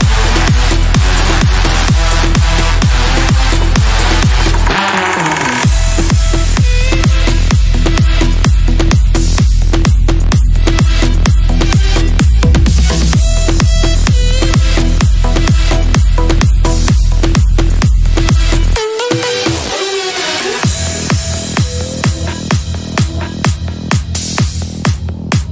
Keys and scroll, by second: 1.3 ctrl+z, 2.2 shift+Page_Down, 6.4 c, 16.3 g, 16.9 F3, 20.3 shift+F2, 20.7 Escape, 21.4 F3, 21.6 Escape.